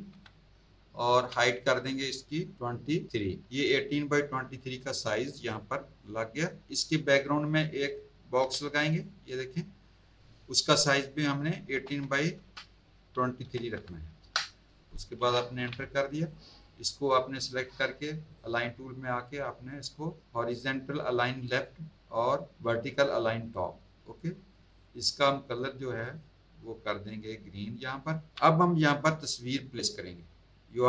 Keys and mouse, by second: 0.1 KP_8, 1.0 Tab, 2.5 KP_2, 3.1 KP_3, 5.0 click, 5.6 click, 8.4 m, 8.9 click, 11.7 KP_1, 12.0 KP_8, 12.3 Tab, 13.4 KP_2, 14.2 Return, 16.2 click, 18.2 click, 21.3 click, 23.4 click, 24.1 click, 24.7 click, 26.0 click, 27.9 click, 28.3 v, 28.8 click, 30.7 click.